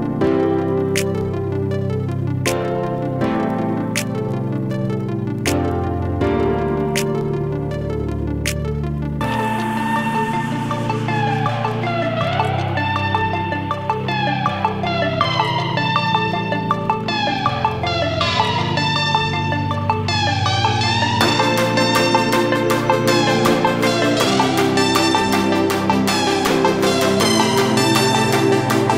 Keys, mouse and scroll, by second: 2.6 click, 4.6-8.0 drag, 9.0-12.2 drag, 12.2 Down, 15.2 click, 16.6 Down, 17.1 click, 18.3 ctrl+space, 18.3 ctrl+click, 18.7 ctrl+space, 19.2-26.8 drag, 26.8 right click.